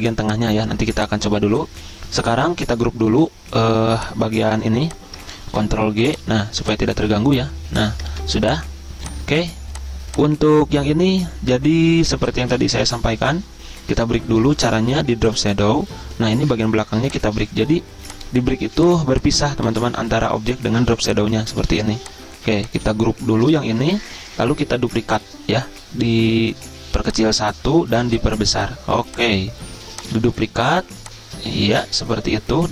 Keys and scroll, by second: 3.1 ctrl+f, 5.5 ctrl+g, 8.2 ctrl+z, 10.2 ctrl+z, 19.7 ctrl+z, 21.5 ctrl+z, 23.8 ctrl+g.